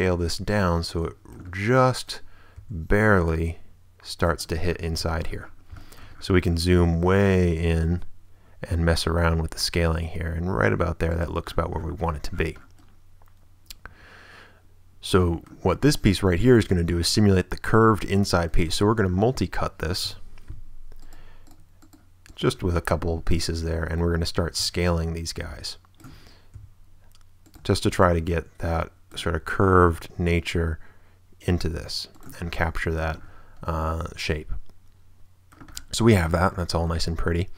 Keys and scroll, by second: 2.5 s, 7.8 shift+s, 16.0 Tab, 18.7 Tab, 19.1 a, 20.3 k, 22.9 Return, 24.1 a, 25.1 ctrl+a, 26.5 ctrl+s, 27.2 s, 27.8 a, 29.9 ctrl+s, 30.5 s, 33.1 Tab.